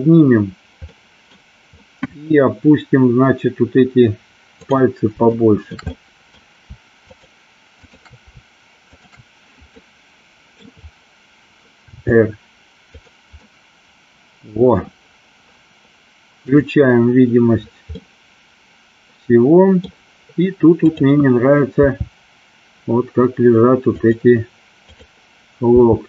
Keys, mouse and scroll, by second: 1.1 middle drag, 1.9 scroll up 1, 2.1 middle drag, 5.5-5.8 shift+middle drag, 5.9-6.3 middle drag, 7.0 shift+click, 7.8-8.2 shift+drag, 9.0 shift+click, 9.8-10.6 middle drag, 12.1 r, 13.1 click, 13.4-14.8 middle drag, 18.1-19.8 middle drag, 19.8 scroll down 1, 20.8 click, 21.9 r, 24.1 click, 25.8 r.